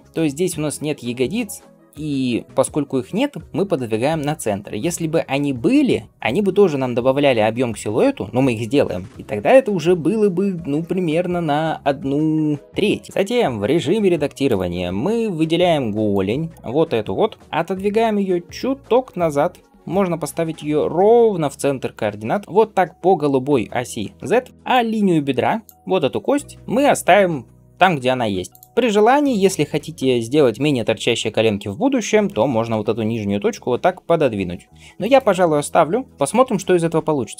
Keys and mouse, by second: 9.1-17.7 right drag, 14.3 click, 16.0-17.7 drag, 17.7 g, 21.3-24.3 drag, 24.3-35.0 right drag, 24.6-28.5 drag, 24.6-28.5 middle drag, 32.2 g, 35.0-37.3 middle drag.